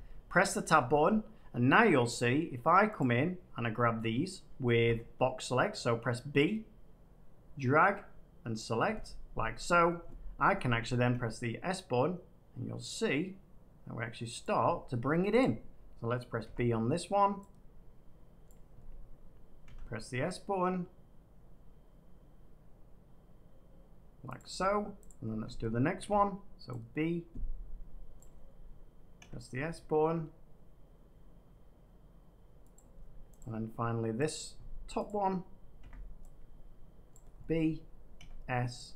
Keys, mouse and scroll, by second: 2.1 click, 2.9 click, 4.7 b, 8.5 click, 10.9 s, 14.3 click, 15.3 click, 16.4 b, 18.4 click, 19.2 click, 19.6 s, 24.3-25.9 drag, 25.9 b, 28.1 click, 29.1 s, 32.7-35.7 drag, 35.7 b, 37.1 click, 38.1 s.